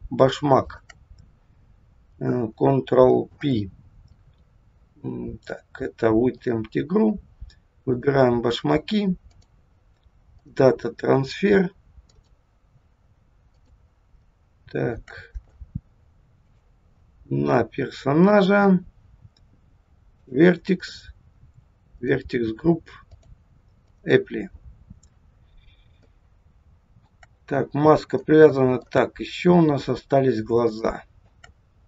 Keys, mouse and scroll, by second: 0.6 shift+click, 3.2 ctrl+p, 7.8 click, 9.3 click, 12.1 click, 14.2 shift+middle click, 16.4 click, 20.3 click, 20.8 click, 21.2-21.9 scroll down 2, 22.5 click, 23.1 click, 25.4-26.0 scroll down 2, 26.1 shift+middle click, 29.2-29.7 scroll up 5, 30.3 scroll up 2, 30.8 shift+middle click, 31.7 scroll up 1.